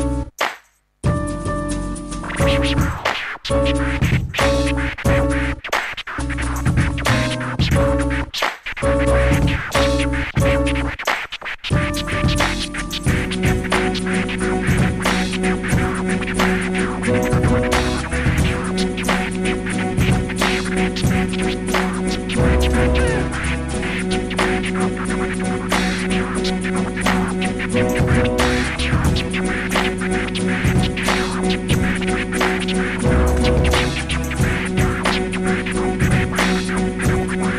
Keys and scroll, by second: 0.0-3.3 typing, 4.4-6.9 typing, 13.6-15.5 typing, 31.0 i, 31.8 BackSpace.